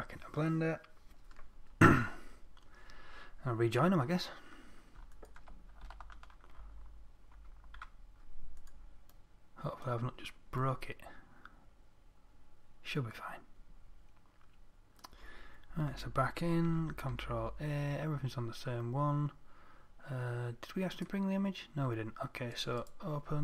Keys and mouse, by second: 5.6 right click, 7.8 ctrl+j, 9.1-13.1 drag, 16.3 Tab, 17.1 a, 17.6 a, 21.4-23.4 drag.